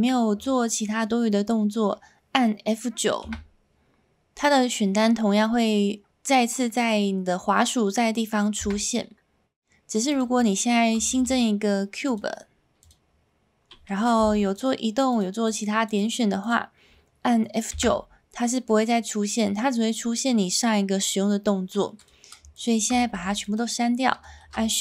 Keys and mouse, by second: 3.2 F9, 8.6 F9, 11.1 shift+a, 14.2 g, 14.5 click, 15.1 click, 15.4 click, 15.9 click, 16.4 click, 17.7 F9, 22.5 shift+click, 23.1 x, 24.4 shift+a.